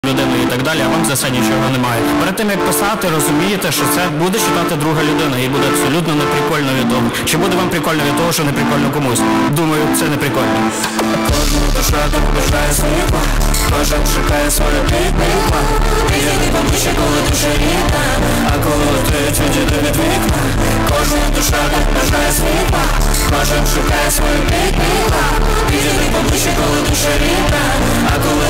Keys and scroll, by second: 0.1 ctrl+q, 2.6-3.2 Up, 2.6 a, 3.5 Up, 3.7 Up, 3.7 Return.